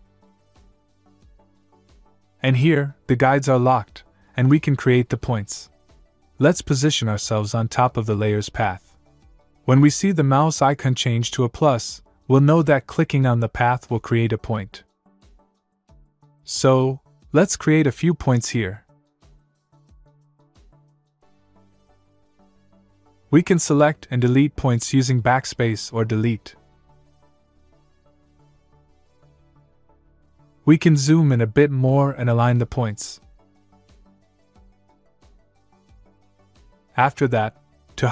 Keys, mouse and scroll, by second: 2.4 click, 7.5 z.